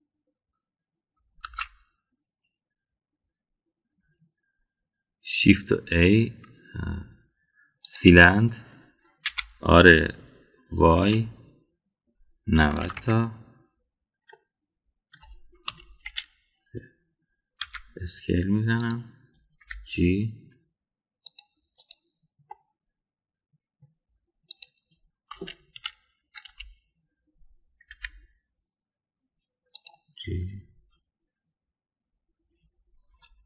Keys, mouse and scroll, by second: 2.3 shift+a, 10.2 r, 15.2-16.1 middle drag, 16.6 KP_1, 17.0 KP_3, 18.5 s, 20.5 g, 22.8 click, 23.5-24.8 middle drag, 25.5 click, 26.2 KP_1, 26.7 KP_3, 27.4 KP_1, 28.8 g.